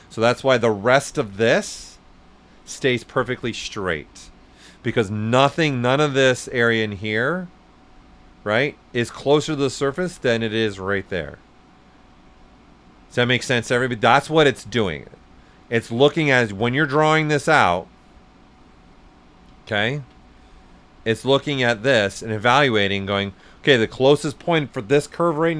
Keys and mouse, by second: 5.2 right click, 5.2 typing, 8.7 right click, 8.7 typing, 11.8-13.2 typing, 13.2 ctrl+right click, 13.3 ctrl+right click, 14.1 right click, 18.4 click, 19.6 ctrl+z, 20.3 click, 22.2 right click.